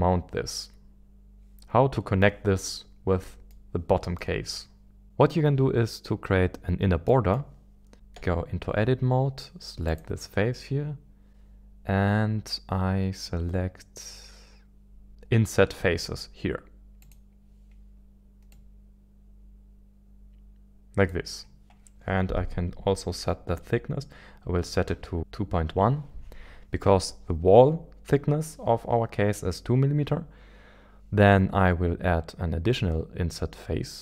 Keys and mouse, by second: 2.6-3.5 middle drag, 4.1-5.1 middle drag, 7.1-7.4 middle drag, 8.2 Tab, 17.0 click, 18.6 click, 21.6 click.